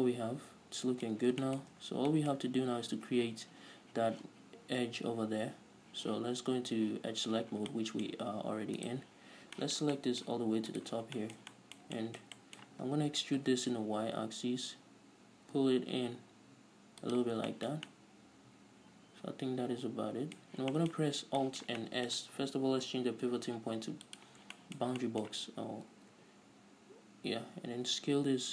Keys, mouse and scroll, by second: 1.5-1.8 scroll up 2, 2.4 Tab, 2.7-3.5 scroll up 2, 3.5-7.5 scroll down 2, 8.5-9.1 scroll up 2, 9.1 scroll up 1, 9.2 right click, 9.7 scroll down 1, 10.0-11.3 shift+middle drag, 11.3 ctrl+right click, 11.6-17.6 shift+middle drag, 13.9 e, 17.6 shift+click, 17.9-23.3 shift+middle drag, 20.8-21.1 scroll up 2, 21.5 scroll down 2, 23.2 ., 24.9 shift+middle click, 25.4 middle click, 26.3 alt+s.